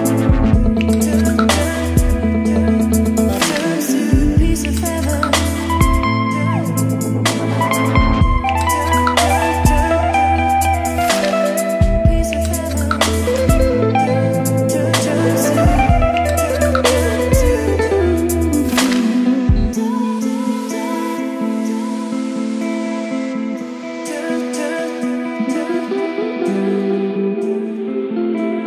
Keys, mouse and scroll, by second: 4.1-5.8 middle drag, 5.8-10.2 drag, 10.0-11.3 typing, 13.6-20.9 drag, 20.9-28.6 typing, 23.2 Return.